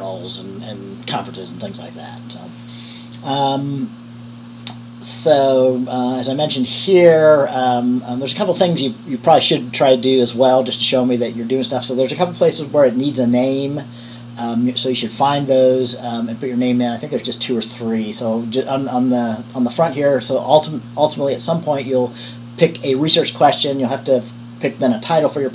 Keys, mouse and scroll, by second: 15.3 click, 21.2-25.5 drag.